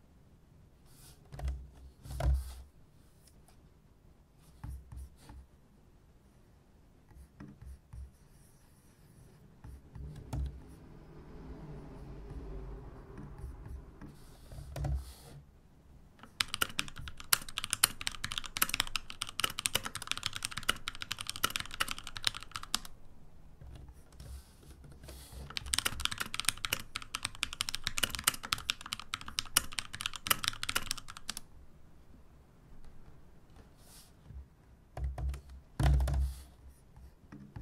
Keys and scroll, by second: 16.4-23.0 typing, 25.4-31.6 typing.